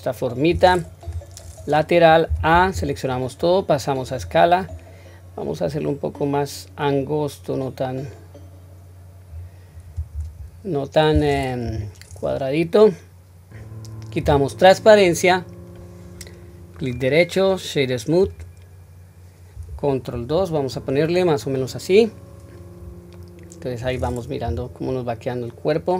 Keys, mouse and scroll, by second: 1.0 KP_3, 2.3 a, 4.0 click, 5.6-9.3 drag, 10.1 Tab, 11.6 KP_1, 14.2 q, 16.8-19.9 right drag, 20.1 ctrl+2, 21.5-23.1 scroll down 1, 23.1-24.4 middle drag, 24.4 KP_1, 24.8-25.3 scroll down 1, 25.8-25.9 scroll up 2.